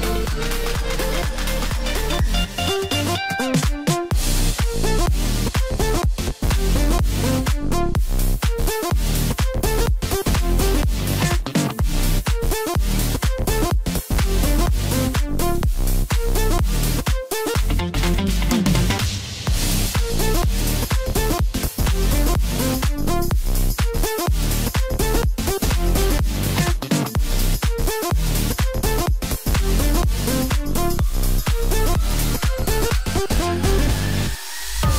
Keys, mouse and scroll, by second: 0.4 KP_3, 1.2-2.4 scroll up 2, 2.4 i, 11.4-12.4 middle drag, 12.4 scroll down 1, 12.6-14.5 middle drag, 14.5 e, 16.6-17.0 scroll down 3, 17.0-18.0 middle drag, 18.0-18.5 scroll up 1, 19.2 Tab, 20.1 KP_1, 20.9-21.3 scroll up 2, 21.3-22.1 scroll down 1, 22.1-28.1 drag, 28.9-31.9 drag.